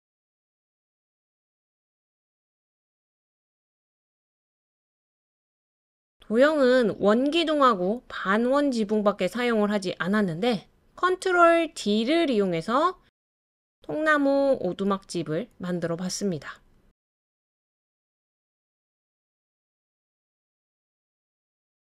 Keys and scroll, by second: 1.0 Left.